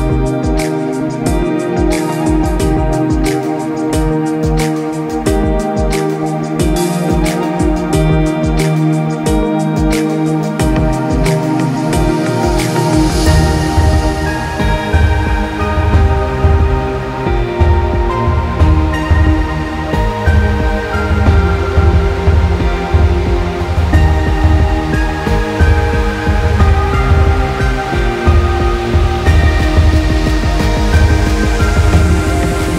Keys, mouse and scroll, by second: 0.0 middle click, 0.2 middle click, 1.0 click, 1.5 middle click, 2.8 g, 5.1 click, 5.4 middle click, 6.0 Tab, 6.2 click, 6.8 middle click, 7.2 scroll down 1, 7.4 middle click, 8.1 click, 8.3 middle click, 8.7-9.5 scroll up 6, 9.0 middle click, 9.5 click, 10.2 click, 11.0 Tab, 11.4 middle click, 11.8 scroll down 1, 12.0 middle click, 12.7 click, 13.5 click, 13.9 g, 16.7 click, 17.2 g, 21.0 click, 21.5 g, 24.6 middle click, 25.3-26.2 scroll down 2, 25.6 middle click, 26.4 click, 27.0 g, 29.9-30.3 scroll up 2, 30.3 scroll down 1, 30.5 middle click, 31.0 middle click, 31.8 click, 32.6 click.